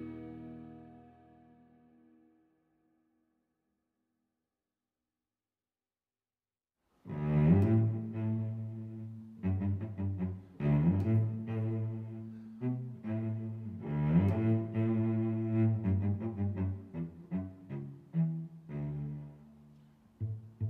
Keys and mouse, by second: 1.5 Tab, 2.5 click, 4.2 click, 6.4 click, 6.6 click, 6.8 click, 14.3 middle click, 15.9 Tab, 16.6 a, 17.6 click, 19.6 g, 19.9 x.